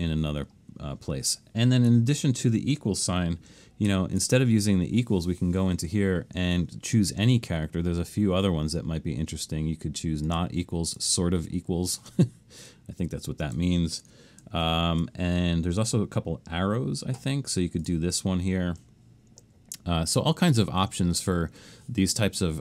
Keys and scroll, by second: 3.9 alt+shift+super+s, 14.6 alt+shift+super+s.